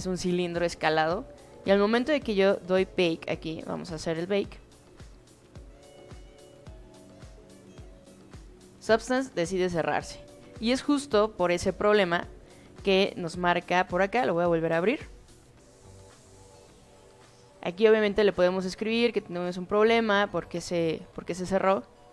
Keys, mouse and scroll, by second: 5.7 click, 13.1 click, 21.0 click.